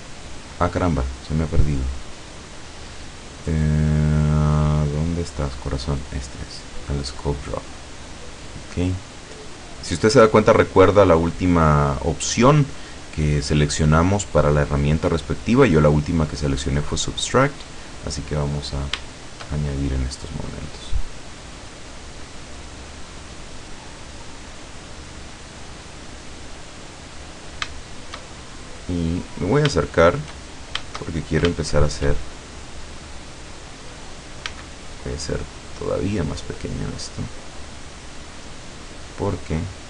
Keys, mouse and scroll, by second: 7.4 click, 8.2 scroll up 2, 8.6 scroll down 2, 17.6 click, 18.5-18.9 scroll up 1, 19.2-20.7 shift+middle drag, 21.6-25.6 drag, 25.7-27.0 drag, 27.4-27.9 scroll down 1, 27.9 shift+middle click, 28.6-29.0 shift+scroll up 1, 29.4 scroll up 1, 29.9 shift+middle click, 31.2 shift+scroll down 2, 31.7 shift+middle click, 32.6-32.9 shift+scroll down 3, 34.5 f, 36.2 click, 37.1-39.8 drag.